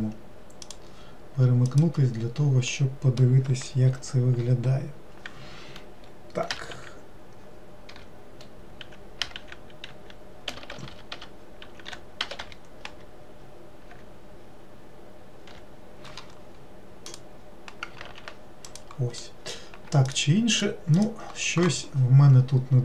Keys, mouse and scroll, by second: 2.7-3.9 middle drag, 3.9 F3, 10.6 BackSpace, 10.8 BackSpace, 18.6 click, 19.2 middle click, 20.1 shift+click, 20.5 shift+click, 21.0 shift+click.